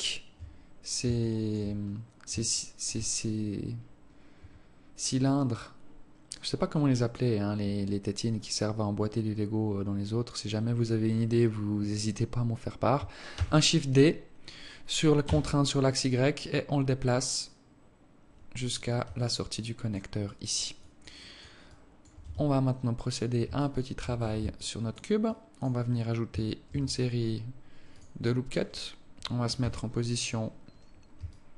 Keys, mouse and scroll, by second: 0.2 shift+right click, 1.5 alt+shift+click, 2.1-2.8 scroll up 2, 2.8 alt+shift+click, 13.6 shift+d, 19.4 alt+click, 20.5 alt+click, 21.1 alt+click, 21.5 alt+click, 22.1 alt+click, 22.5 Tab, 22.8 scroll up 3, 23.8 alt+shift+click, 24.8 alt+click, 25.7 alt+click, 27.0 ctrl+r, 29.9 KP_1.